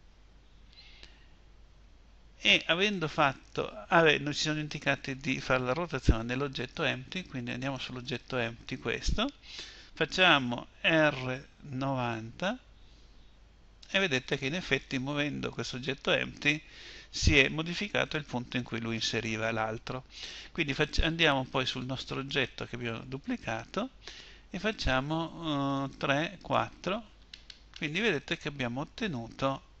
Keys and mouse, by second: 7.0-10.5 drag, 10.5 r.